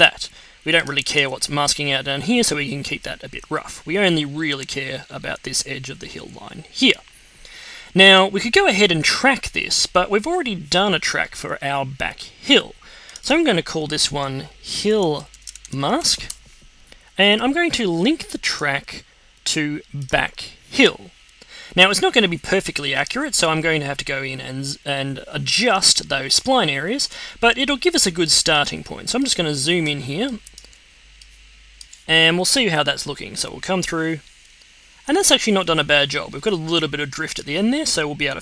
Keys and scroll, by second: 14.6-16.4 typing, 26.4 z, 27.7 z, 30.7 x.